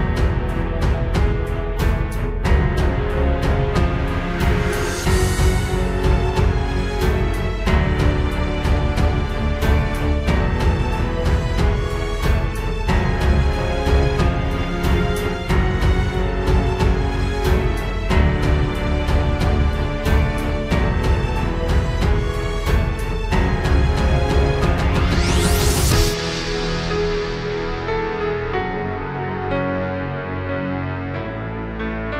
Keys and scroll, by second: 0.7 ctrl+space, 1.2 ctrl+z, 1.7 ctrl+space, 6.5 ctrl+space, 9.0 ctrl+space, 10.6 ctrl+s, 11.5 ctrl+z, 11.8 ctrl+space, 12.3 ctrl+s, 13.1 ctrl+space, 13.9 ctrl+space, 14.3 ctrl+z, 17.2 ctrl+space, 19.8 ctrl+space, 20.2 ctrl+s, 22.8 ctrl+d, 22.9 ctrl+space, 23.7 ctrl+z, 24.3 ctrl+z, 24.7 ctrl+s, 25.3 ctrl+space, 26.2 ctrl+space, 27.0 ctrl+space, 28.1 ctrl+space, 28.5 ctrl+z, 29.2 ctrl+space, 29.7 ctrl+space, 30.2 ctrl+z, 30.6 ctrl+space, 30.8 ctrl+s.